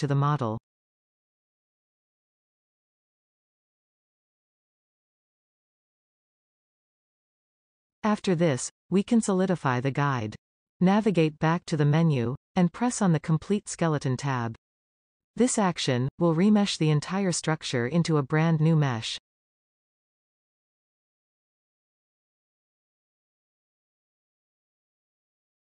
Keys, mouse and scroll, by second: 0.0-0.3 scroll down 1, 0.3-2.8 middle drag, 3.2 z, 4.4-6.2 shift+middle drag, 6.2 click, 6.6 g, 8.2-12.8 middle drag, 15.3-18.3 drag, 19.1-19.7 scroll down 2, 19.7-22.2 middle drag, 24.1-25.7 middle drag.